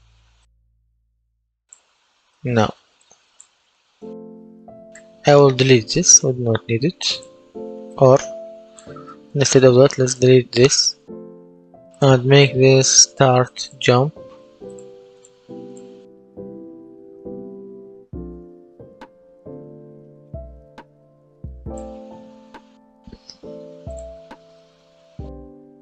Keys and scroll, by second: 6.1 Delete, 10.9 Delete, 16.3 space, 16.7 Left, 17.4-19.1 typing, 22.4 F10.